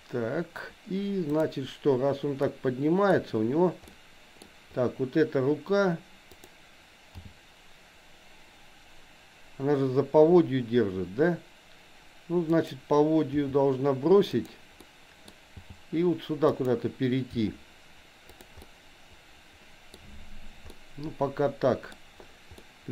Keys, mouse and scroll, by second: 1.3 click, 2.5 middle click, 3.9 middle click, 6.4 click, 7.2 g, 13.4 r, 14.8 middle click, 15.7 g, 17.3 r, 18.7-19.9 middle drag, 20.8-21.9 middle drag, 22.7 middle click.